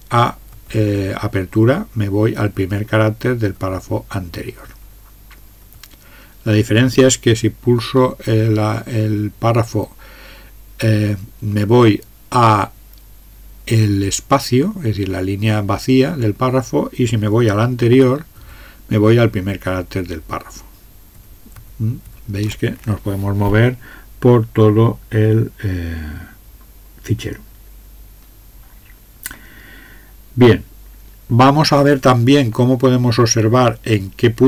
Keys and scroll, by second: 0.5 alt+(, 1.4 alt+(, 2.5 alt+(, 3.5 alt+(, 4.7 alt+(, 5.6 alt+(, 9.7 alt+), 18.3 alt+(, 21.1 alt+), 21.5 alt+), 22.1 alt+).